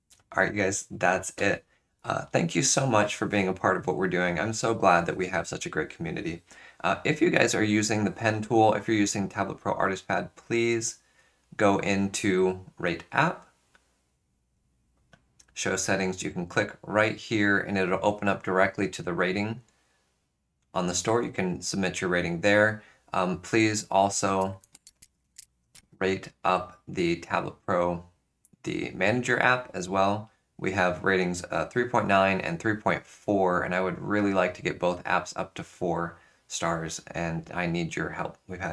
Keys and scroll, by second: 24.2-25.8 typing.